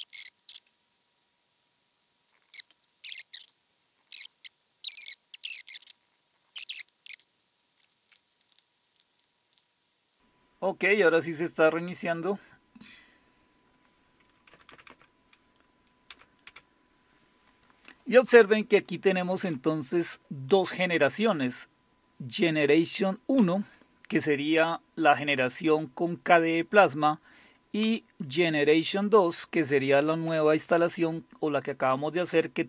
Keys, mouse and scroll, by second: 0.0 click, 0.1 click, 0.3 click, 0.5 click, 0.7 click, 0.8 click, 1.0 click, 1.2 click, 1.4 click, 1.6 click, 1.7 click, 2.0 click, 2.1-4.5 typing, 2.2 click, 2.6 click, 2.8 click, 2.9 click, 3.1 click, 3.3 click, 3.7 click, 5.1 click, 5.7 ctrl+click, 5.8 ctrl+c, 5.9 ctrl+c, 6.0 ctrl+z, 6.1 ctrl+click, 6.2 click, 6.3 ctrl+c, 6.4 Return, 9.2 click, 14.7 Down, 14.9 Down, 16.1 Up, 16.5 Up, 19.5 Down, 29.9 Down, 30.1 Down, 30.5 Up, 30.7 Up, 30.9 Up.